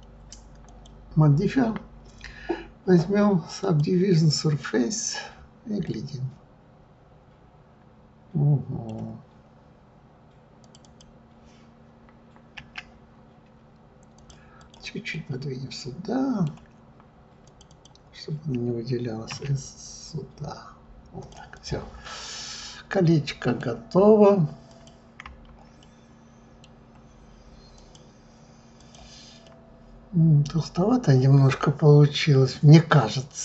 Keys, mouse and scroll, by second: 0.6-3.7 drag, 4.8-5.1 scroll up 2, 5.4 scroll down 2, 5.8-8.7 middle drag, 9.3-10.6 scroll up 1, 10.6 click, 10.8 click, 12.5 s, 14.1 s, 14.6 click, 15.1-17.4 middle drag, 17.4 click, 17.7 click, 19.3 s, 21.5 click, 22.0-24.7 middle drag, 24.7 click, 25.8-27.7 middle drag, 27.7 click, 28.8 click, 29.4-32.5 middle drag.